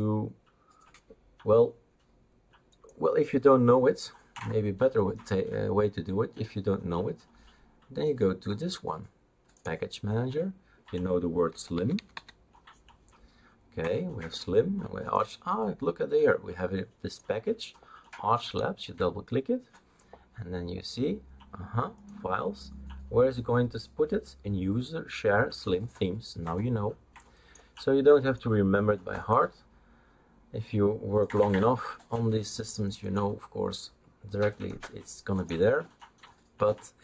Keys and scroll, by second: 11.5-12.6 typing.